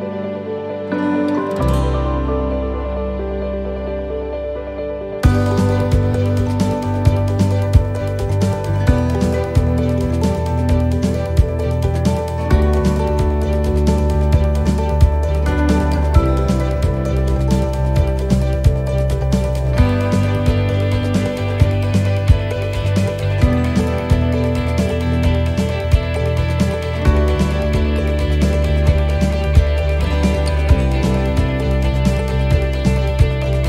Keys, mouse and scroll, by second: 0.4 shift+right click, 1.1 shift+right click, 2.5 click, 4.8 middle click, 6.2 shift+middle click, 6.9-7.5 scroll up 1, 7.5 shift+middle click, 9.4 click, 11.2-11.8 scroll up 1, 12.0 right click, 12.6 alt+shift+right click, 13.2 middle click, 15.0 middle click, 15.2 shift+middle click, 15.3 shift+middle click, 21.3 e, 21.6 alt+shift+right click, 22.7 e, 23.7 alt+s, 27.1 click, 30.3 right click, 31.0 alt+shift+right click, 31.6 middle click, 33.0 e.